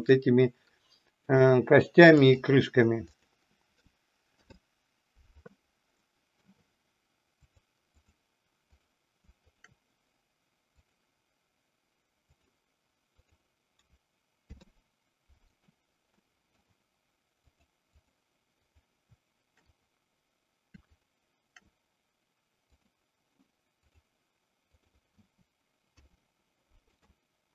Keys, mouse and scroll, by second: 1.4-2.4 drag, 3.0 click, 4.2 ctrl+p, 5.9 middle click, 7.4-8.1 drag, 8.6-9.0 drag, 10.6-12.5 drag, 14.4 ctrl+p, 16.1 middle click, 17.4-18.1 drag, 18.6 drag, 19.6 click, 20.9 shift+click, 22.9-24.0 drag, 25.7 ctrl+p.